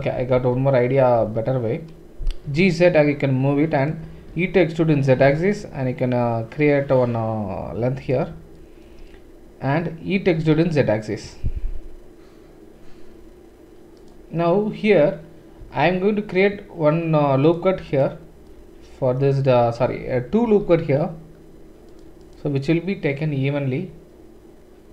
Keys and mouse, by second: 0.0 ctrl+z, 0.4 ctrl+z, 1.2 ctrl+z, 2.4 g, 4.3 e, 8.4-24.9 shift+middle drag, 10.4 e, 15.6 ctrl+r, 19.9 ctrl+z, 20.5 ctrl+r.